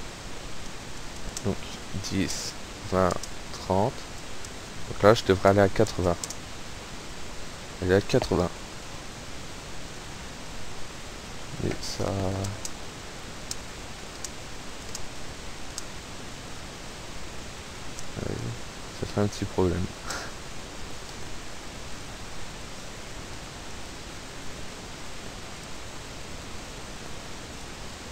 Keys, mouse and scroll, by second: 0.6 p, 1.0 space, 2.3 space, 3.2 space, 6.3 space, 8.2 Escape, 12.1-15.8 typing, 16.8 Right, 18.9 Up, 19.4 Right, 20.3 Escape, 22.0 click, 22.6 click, 23.7 click, 25.3 click, 27.5 click.